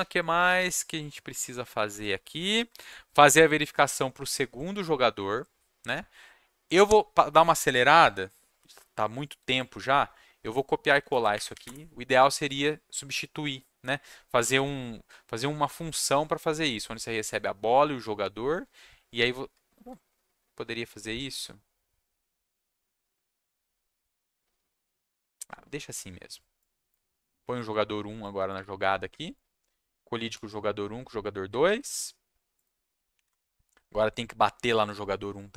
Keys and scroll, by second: 11.1 ctrl+shift+Down, 11.3 Up, 11.6 Return, 28.5 1, 30.3 ctrl+s, 33.1 Up, 33.3 Return.